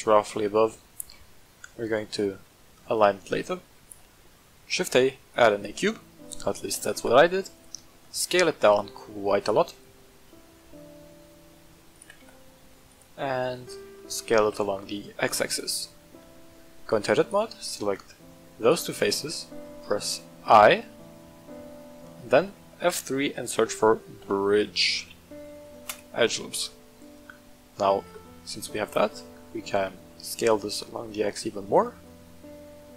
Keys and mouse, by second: 0.1-0.6 shift+middle drag, 1.1-2.0 middle drag, 2.4 shift+middle drag, 3.2-3.6 middle drag, 3.9 shift+a, 6.7 g, 6.9 z, 7.5 click, 7.9 s, 9.3 click, 9.7 middle click, 10.6-11.1 shift+middle drag, 11.4 s, 11.9 click, 12.0 g, 12.2 z, 12.8 click, 13.4 middle click, 14.0 middle click, 14.4 s, 14.6 x, 15.4 click, 15.8 middle drag, 16.2 Tab, 17.2 click, 17.7 middle click, 18.6 shift+middle click, 18.9 middle click, 20.3 i, 22.1 click, 22.9 F3, 26.9-28.5 middle drag, 28.7 Tab, 29.0-29.3 middle drag, 29.6 s, 29.8 x, 31.7 click, 32.0-32.9 middle drag.